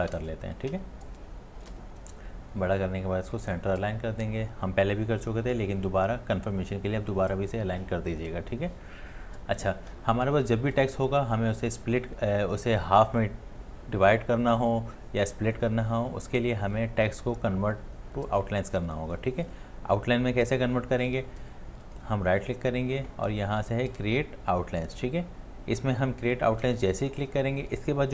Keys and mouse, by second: 0.8-1.6 shift+click, 1.2 shift+click, 1.2 shift+click, 21.9 shift+click.